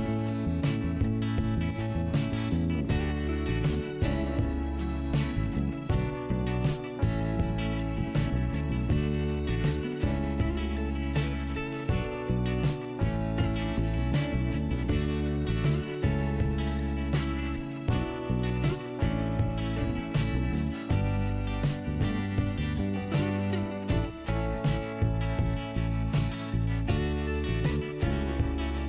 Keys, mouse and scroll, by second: 1.0 click, 1.1 click, 1.9 click, 2.8-3.7 scroll up 1, 3.9 scroll up 1, 3.9 click, 5.8 scroll down 3, 5.9 click, 6.6-7.1 scroll up 2, 7.1 click, 8.2 click, 9.6 click, 10.7 click, 12.6 scroll down 2, 14.0 click, 14.5-15.6 scroll down 1, 16.3 click, 17.9 click, 19.0 click, 20.6 click, 21.4 click, 21.9 scroll up 1, 22.3 click, 23.4 click, 24.9 click, 25.8 click, 27.3 click, 28.4 click.